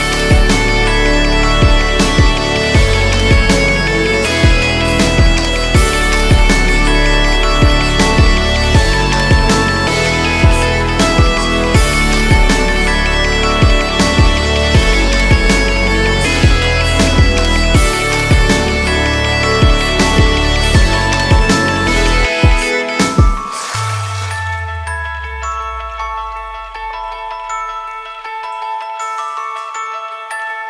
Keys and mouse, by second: 0.1 ctrl+r, 3.4 1, 4.1 alt+z, 6.0 a, 11.3 s, 17.4 Tab, 20.3 Tab, 21.1 Tab, 21.5 alt+z, 21.9 Tab, 22.2 Tab, 24.4 shift+click, 26.5 Tab, 29.5 s.